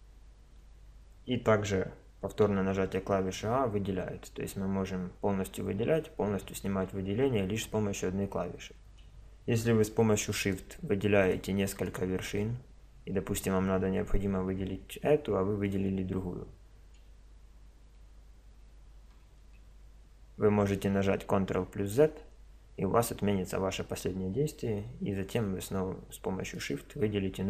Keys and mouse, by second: 2.5 a, 5.3 a, 10.4-13.9 drag, 15.7-17.7 drag, 19.4 ctrl+z, 26.6-27.4 middle drag.